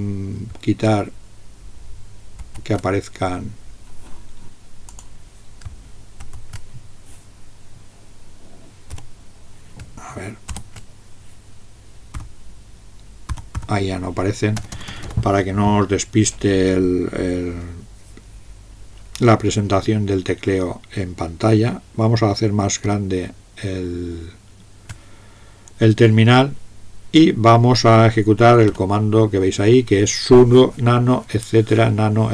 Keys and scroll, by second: 8.9 n.